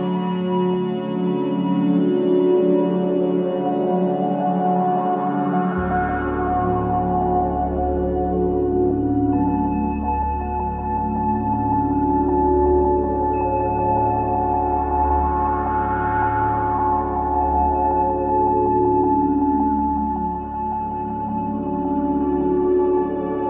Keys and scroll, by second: 1.2 c, 1.9 Escape, 3.2 F4, 3.9 Escape, 7.7 space, 10.5 Escape, 15.9 ctrl+g, 17.1 ctrl+g, 17.7 c, 18.4 Escape, 20.3 F3, 20.8 F2.